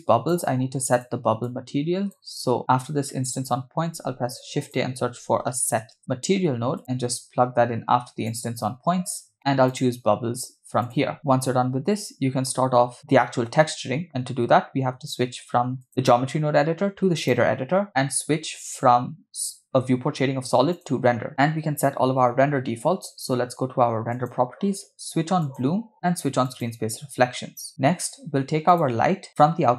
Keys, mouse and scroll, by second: 1.1 click, 1.4 click, 2.6 middle click, 2.6 scroll up 2, 3.8 shift+a, 6.8-8.7 drag, 9.4 middle click, 9.4 scroll up 3, 9.7-11.1 drag, 15.8-17.4 drag, 24.1 click, 25.6 click, 26.7 click, 28.7 click.